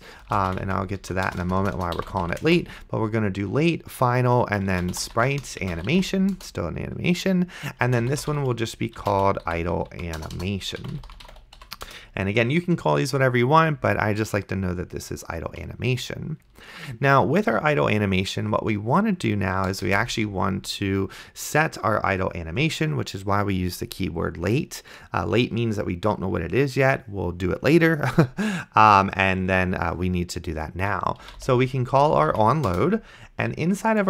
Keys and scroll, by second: 0.0-2.8 typing, 4.6-6.5 typing, 7.8-12.1 typing, 20.0 Return, 31.3-32.8 typing.